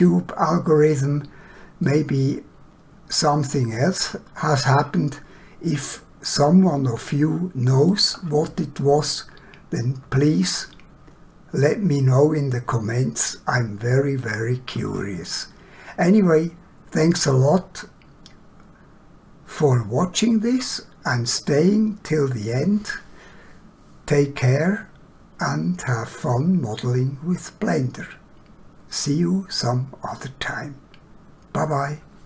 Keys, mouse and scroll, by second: 1.9 middle click, 17.5 scroll up 1.